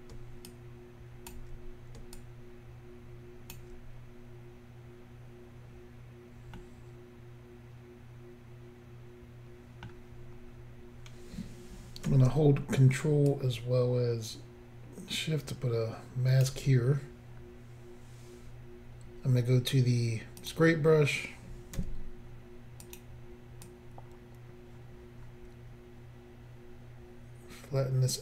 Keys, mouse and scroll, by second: 0.5 shift+click, 2.2 shift+click, 6.6 middle click, 13.3 ctrl+click, 20.4 click, 20.5 click, 21.8 f, 22.9 click, 23.0 click, 23.7 click.